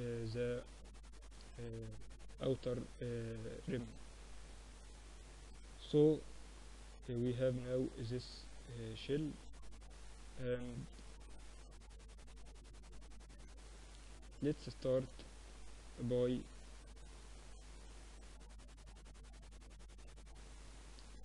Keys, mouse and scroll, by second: 0.8-2.8 drag, 3.0-4.4 drag, 4.4-6.2 middle drag, 6.2-7.2 drag, 12.4-15.6 drag, 14.4 shift+c, 14.8 shift+a, 16.3 middle click, 16.7-21.2 drag, 20.6 shift+a.